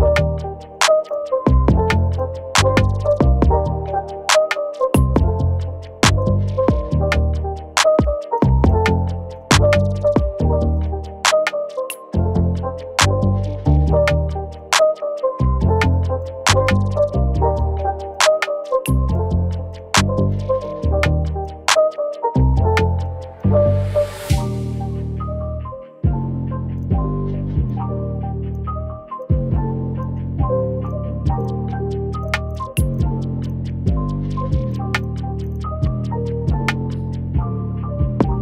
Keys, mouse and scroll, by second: 9.0 alt+scroll up 1, 12.3-12.7 alt+scroll down 2, 12.9 ctrl+scroll up 1, 13.2-13.8 scroll down 1, 14.5 alt+click, 17.1 Delete, 17.8 Delete, 18.7 alt+click, 19.0 right click, 22.2 shift+click, 35.5 double click, 35.8 alt+scroll up 1, 36.1 scroll down 1, 36.3 scroll down 1, 37.3 scroll up 1, 37.6 alt+scroll down 1.